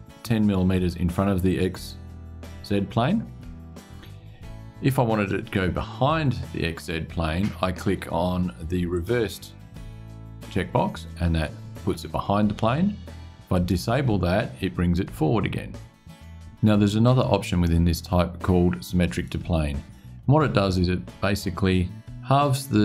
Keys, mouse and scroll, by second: 8.7 click, 13.3 click.